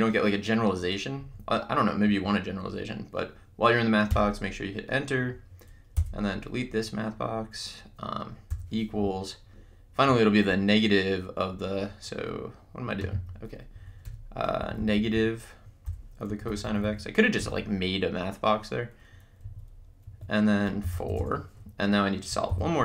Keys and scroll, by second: 1.2 Right, 2.1 Left, 4.1 Return, 6.0 BackSpace, 8.5 =, 13.9 Right, 14.0 Return, 14.6 Left, 16.0 -, 16.3 Right, 17.4 x, 19.4 Right, 20.6-21.6 typing, 22.6-22.8 typing.